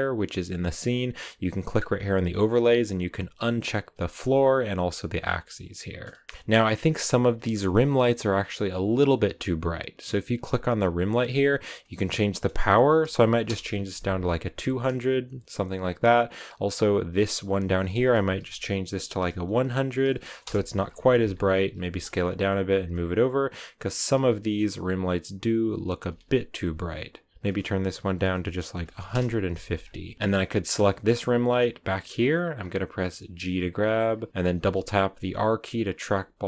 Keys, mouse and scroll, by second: 6.2-8.5 shift+middle drag, 8.5 right click, 9.2 right click, 13.4 0, 14.5 a, 15.1 right click, 15.4 right click, 20.3 0, 21.7-24.7 typing, 24.5 scroll down 2, 25.4 right click, 25.9 s, 26.5 g, 29.0 click, 29.6 a, 29.7 scroll up 2, 30.1 right click, 30.5 r, 31.3-31.6 scroll up 2, 32.5-33.0 scroll down 1, 33.1 g, 34.4 r, 36.1 r.